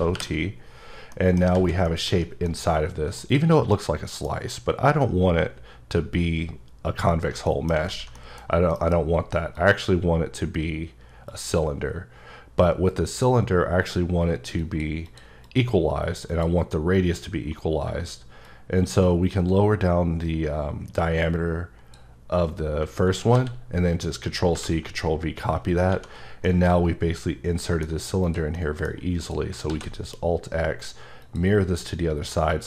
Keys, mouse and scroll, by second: 0.0-0.1 typing, 1.1 middle click, 1.4 scroll down 1, 1.5 z, 2.3 scroll up 1, 2.5 middle click, 3.7 middle click, 7.5 middle click, 7.9 alt+z, 8.1 middle click, 8.7 F9, 9.5 click, 11.3 click, 12.6 click, 14.6 click, 15.0 click, 15.5 click, 16.3 click, 18.8-22.2 shift+drag, 23.3 ctrl+c, 24.5 ctrl+v, 26.3 scroll down 1, 26.4 middle click, 28.2 click, 28.6 middle click, 29.2 click, 29.7 alt+x, 31.2 click, 32.5 click.